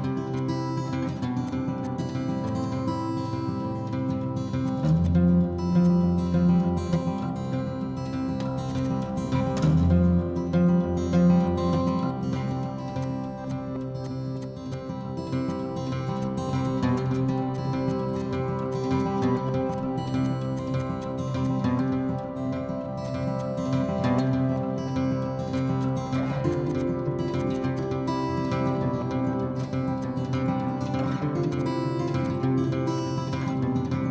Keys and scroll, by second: 3.4 Up, 3.4 ctrl+z, 4.5 Down, 12.9 Escape, 22.5 Down, 22.6 Down, 22.8 Down, 25.3 Escape, 25.4 Escape, 29.2 ctrl+a, 30.6 ctrl+h, 34.0 Escape.